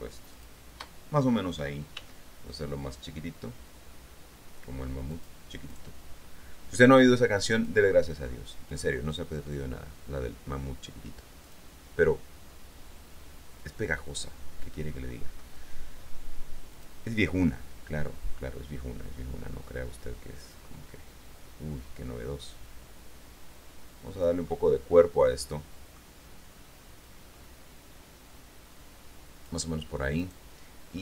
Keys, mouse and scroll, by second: 0.5 shift+click, 2.1 s, 5.3 click, 7.7 click, 8.9 click, 11.6 click, 16.9 click, 20.6 click, 22.7-24.6 drag, 24.8-26.3 middle drag, 30.4 right click.